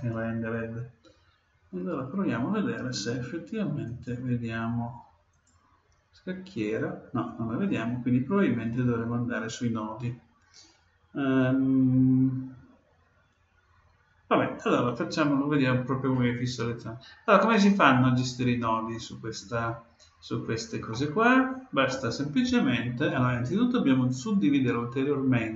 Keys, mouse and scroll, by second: 3.8-5.8 drag, 20.9-22.7 middle drag, 24.1-25.5 drag.